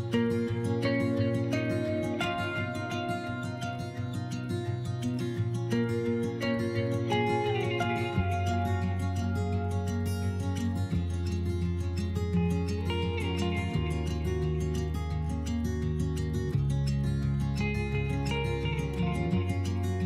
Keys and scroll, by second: 10.6 s, 14.7 s, 18.7 s.